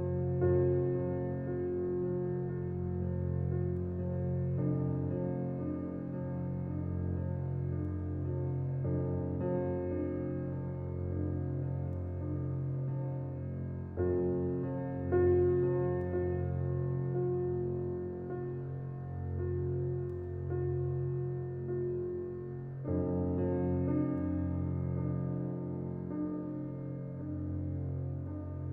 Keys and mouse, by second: 2.1 click, 5.1 click, 7.0-8.2 drag, 8.4 click, 11.6-28.7 typing.